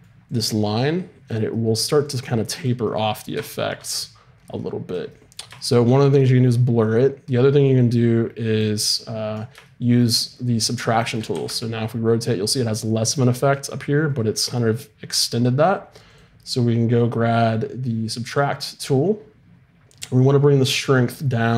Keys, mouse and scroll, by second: 0.3-2.2 drag, 5.7-11.3 drag, 11.3 r, 12.2 click, 16.1-18.4 drag.